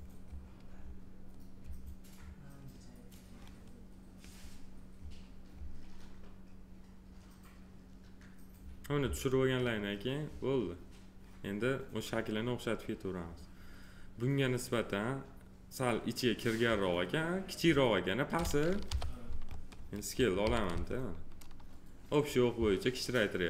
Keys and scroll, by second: 18.9 p, 20.4 r.